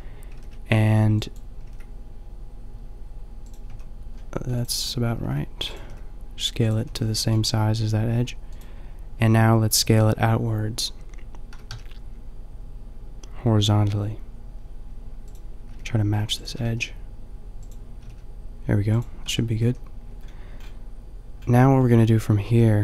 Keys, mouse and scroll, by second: 0.3 g, 1.5 g, 3.7 a, 4.2 middle click, 5.7 g, 6.5 click, 6.8 a, 11.5 s, 15.7 g, 16.4 s, 17.9 g, 19.2 Tab, 19.7 a, 22.4 ctrl+r.